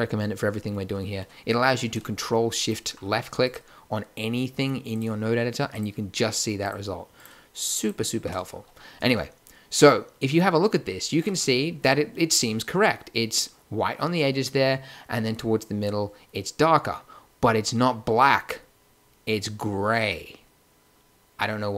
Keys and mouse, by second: 17.5 click, 20.8 middle click, 21.4 middle click.